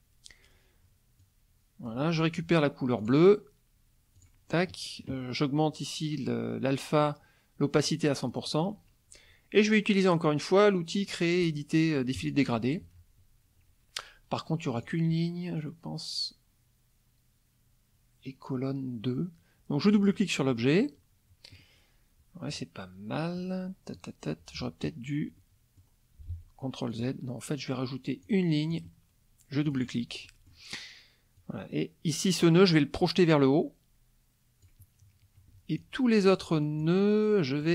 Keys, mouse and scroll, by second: 1.2-2.1 drag, 3.0 click, 4.2 click, 7.8 right click, 8.3 click, 12.2 click, 14.8 click, 19.8 click, 20.5 middle click, 23.4 middle click, 25.4 middle click, 26.3 ctrl+z, 26.9 click, 28.2 click, 28.7 click, 29.6 click, 30.2 middle click, 31.4-34.8 drag, 35.8 click, 36.8-37.7 shift+drag.